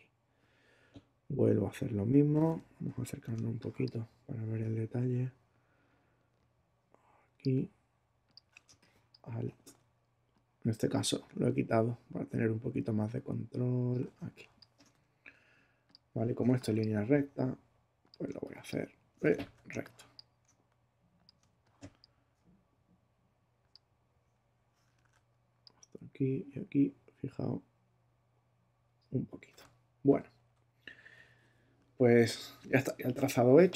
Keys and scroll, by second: 3.3 super+space, 4.3 space, 8.6 alt+space, 9.5 space, 16.4 alt+space, 17.2 space, 18.8 space, 19.3 super+space, 19.4 super+z, 19.7 super+space, 20.5 space, 21.4 space, 25.0 super+z, 30.1 super+-, 32.2 super+-.